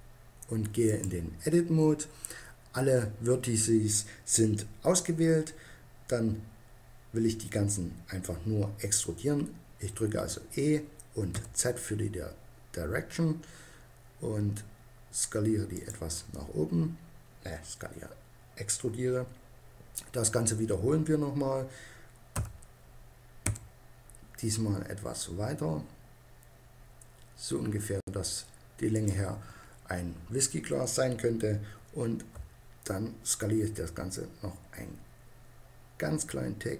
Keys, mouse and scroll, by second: 10.0 e, 15.8-17.3 drag, 17.3-21.4 middle drag, 22.2 e, 28.8-30.6 drag, 32.2 s.